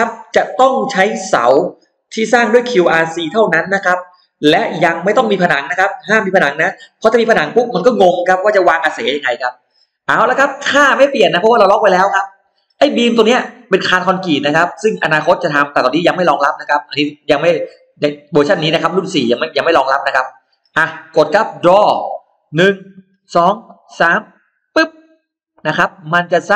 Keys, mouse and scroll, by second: 24.5 click, 25.9 middle click.